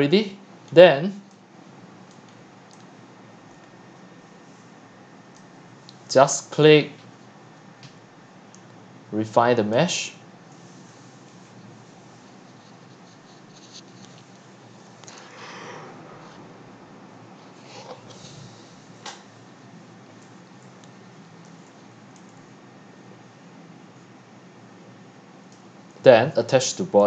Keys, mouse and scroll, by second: 0.0 middle click, 0.7 click, 0.8 click, 2.1 click, 5.4-8.0 drag, 8.0-9.4 scroll down 1, 22.7 click, 23.7-24.7 scroll up 1, 24.7-25.5 scroll up 1, 25.5-26.5 scroll up 1.